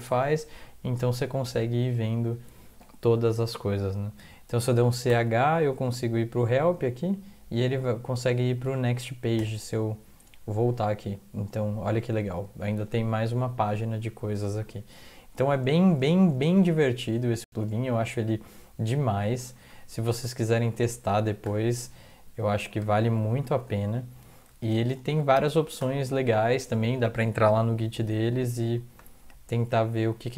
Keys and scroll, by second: 5.1 ctrl+h, 9.3 n, 17.4 Up, 20.1 Down, 20.4 End, 20.6 Left, 20.8 Left, 21.0 Left, 21.4 BackSpace, 21.6 3, 22.5 ctrl+x, 22.8 ctrl+s, 23.5 alt+F4, 24.0 Up, 24.5 alt+Tab, 25.2 typing, 25.5 Up, 25.7 Return.